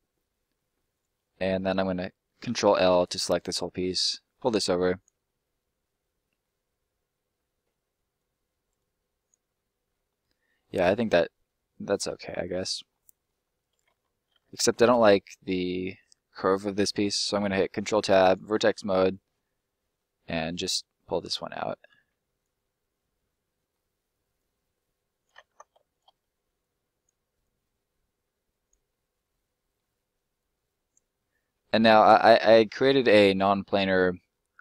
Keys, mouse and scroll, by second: 0.9 right click, 1.2 middle click, 2.4 ctrl+l, 3.7 click, 5.2 middle click, 8.1 click, 9.5 middle click, 10.1 scroll down 1, 10.2 middle click, 12.3-12.9 scroll up 2, 12.4 middle click, 12.9 middle click, 15.0 middle click, 17.2 ctrl+middle click, 18.3 click, 19.0 right click, 19.4 middle click, 20.7 click, 22.5 middle click, 24.3 click, 25.3 ctrl+click, 25.5 ctrl+z, 25.8 shift+right click, 26.5 click, 28.8 middle click, 30.3 click, 31.1 middle click, 32.1 scroll up 1, 32.5 middle click.